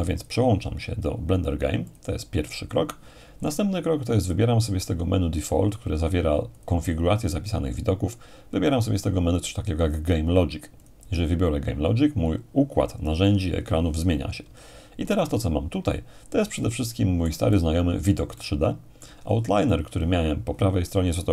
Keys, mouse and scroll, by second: 0.2-1.2 drag, 1.9-2.9 drag, 6.6-7.6 drag, 10.8-11.8 drag, 16.5-19.2 middle drag, 19.2-20.4 scroll up 2.